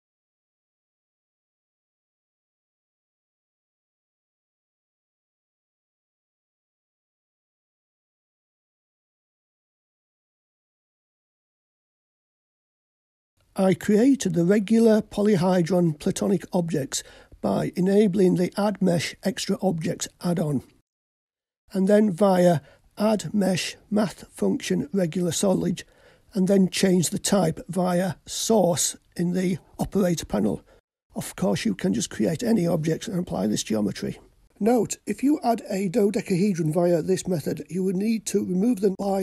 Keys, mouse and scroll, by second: 0.1 click, 1.1-2.5 drag, 5.0-7.9 drag, 13.3 click, 14.8-16.7 drag, 24.8-25.2 drag, 26.7-32.8 drag, 34.9-37.2 drag, 38.0-39.2 drag.